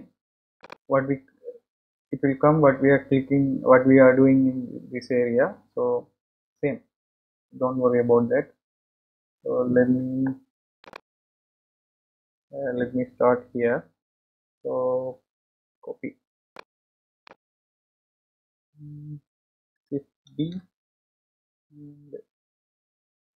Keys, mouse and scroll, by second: 2.4-4.6 drag, 10.9 click, 14.2-15.1 scroll down 6, 15.1-15.8 scroll up 3, 15.9-16.9 scroll down 2, 17.2 click, 20.5 shift+d.